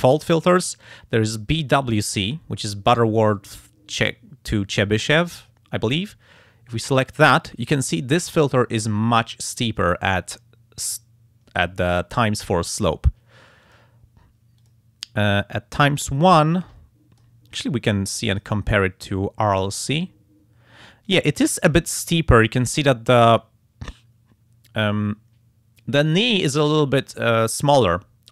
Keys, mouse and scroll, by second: 6.8 click, 13.6 click, 14.6 click, 16.5 click, 18.3 click, 19.9 click, 21.1 click, 22.4 click.